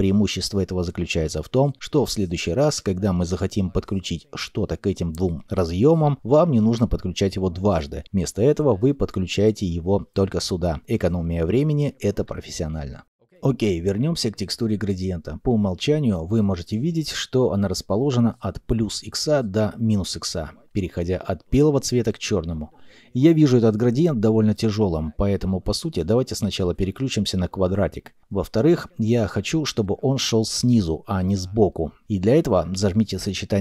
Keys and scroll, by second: 13.2 ctrl+z.